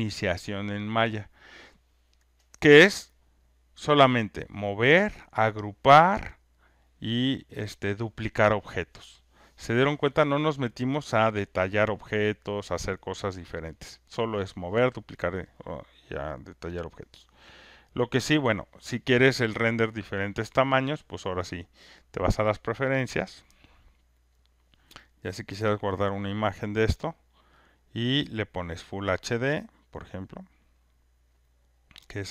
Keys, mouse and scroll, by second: 18.3-19.6 drag, 22.0 click, 24.4 click, 28.4 click, 31.4 click.